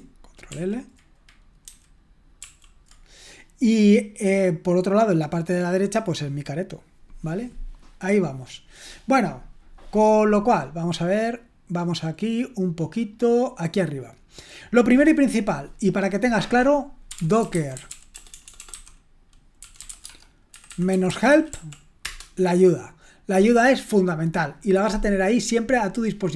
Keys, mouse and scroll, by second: 0.5 ctrl+l, 1.7 ctrl+c, 2.4 ctrl+l, 9.0-10.7 scroll up 2, 10.7-11.6 scroll down 2, 11.7-13.7 scroll up 2, 15.4 click, 16.8-22.0 typing.